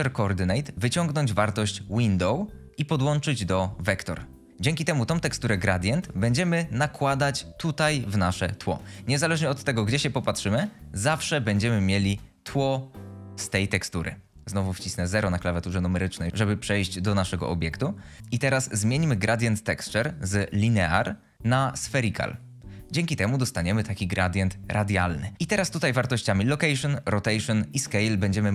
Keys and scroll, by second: 14.9 0, 25.3 ctrl+z.